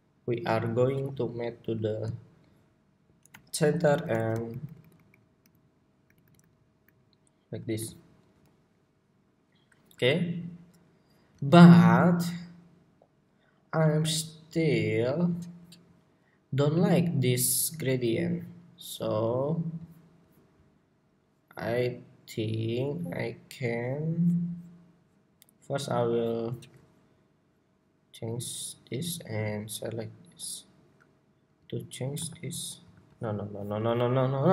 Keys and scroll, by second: 31.9 super+v, 32.6 super+a.